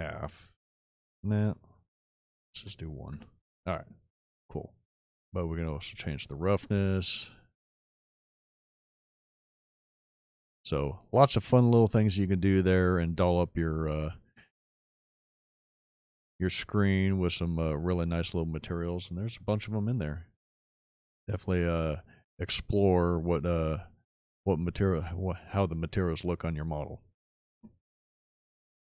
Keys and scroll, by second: 2.5 KP_1, 3.1 Return.